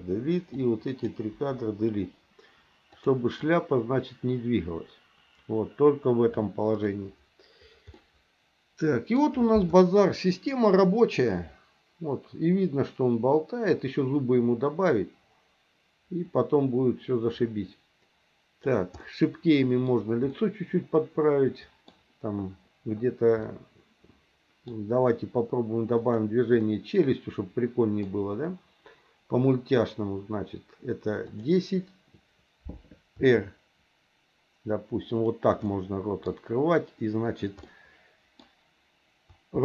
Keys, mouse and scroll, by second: 0.0 Delete, 0.5 click, 1.4 Delete, 3.0 click, 3.4-6.9 drag, 7.9-9.1 middle drag, 11.3-18.8 drag, 19.0 middle click, 20.3-21.9 middle drag, 23.4-24.7 middle drag, 26.0 click, 26.6-28.0 middle drag, 31.3 click, 33.1 r, 35.6 middle click, 37.6 middle click, 39.5 r.